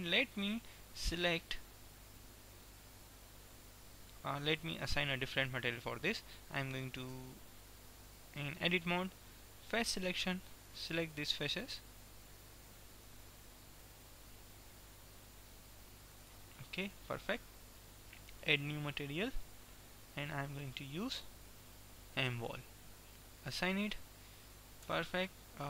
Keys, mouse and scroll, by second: 3.2-5.3 middle drag, 7.3 Tab, 9.8 click, 11.7-12.8 right drag, 12.8-18.5 middle drag, 18.5-19.8 right drag, 19.7-22.8 drag, 23.8 click, 24.8 Tab.